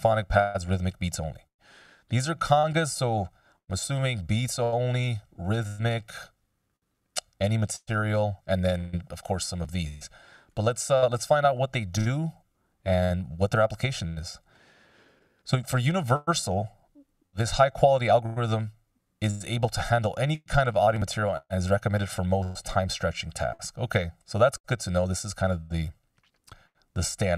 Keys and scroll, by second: 24.1 F16.